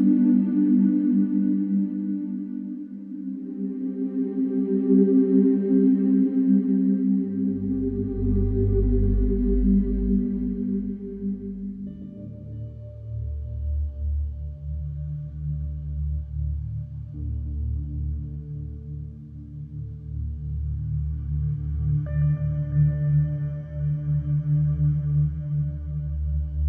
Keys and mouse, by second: 4.4 ctrl+r, 10.1 Escape, 12.8 ctrl+z, 13.5 ctrl+r, 16.0 Escape, 17.2 ctrl+r, 23.7 Escape, 25.7 ctrl+r.